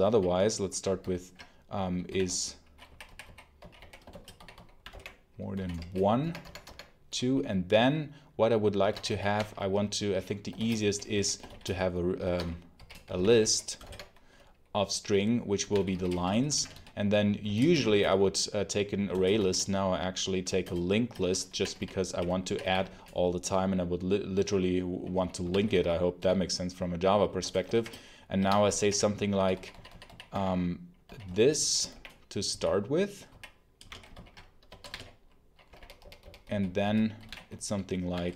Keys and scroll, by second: 0.9 ctrl+super+l, 2.0-6.2 typing, 6.5 Tab, 8.7 Escape, 8.8-13.8 typing, 12.1 Escape, 15.3-19.3 typing, 20.5 ctrl+shift+Return, 21.1-23.2 typing, 25.1-26.6 typing, 27.3 Return, 27.6 shift+', 28.3 Escape, 34.0 ctrl+super+l, 34.5 Escape, 34.7-38.3 typing.